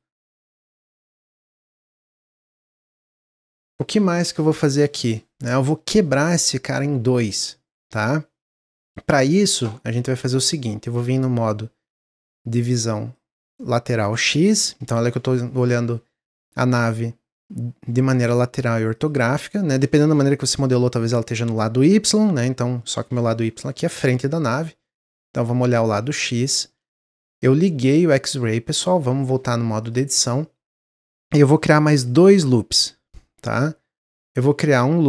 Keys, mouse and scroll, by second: 6.0-10.4 middle drag, 12.9 click, 18.9-21.1 drag, 24.1 click, 26.4-26.8 shift+middle drag, 26.8 scroll up 1, 27.2-29.0 shift+middle drag, 29.0 Tab, 29.7 click.